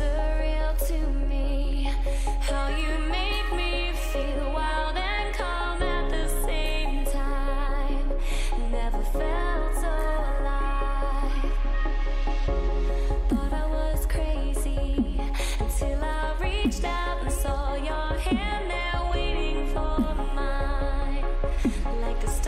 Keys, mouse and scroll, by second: 4.5 a, 4.9 a, 6.9 b, 9.9 a, 11.1 b, 13.9 g, 17.1 a, 18.3 b, 20.6 g.